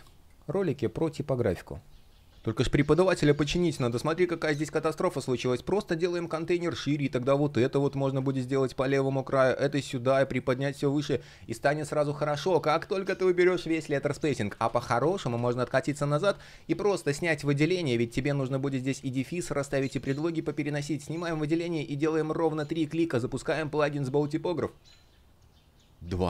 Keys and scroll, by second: 2.1 space, 2.3 shift+3, 3.4 super+я, 7.0 shift+Return, 14.1 super+я.